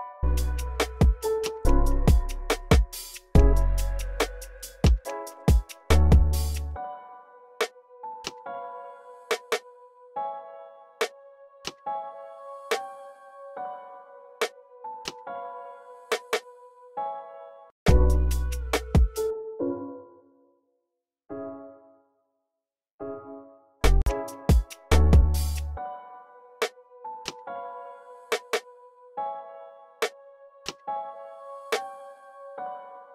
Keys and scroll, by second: 0.0-0.9 typing, 7.5 x, 8.1 y, 12.7 x, 17.2 v, 18.4 x, 18.9 s, 20.0 v, 21.9 v, 22.6 x, 23.0 x, 27.3 x, 27.9 x, 32.6 alt+super+s.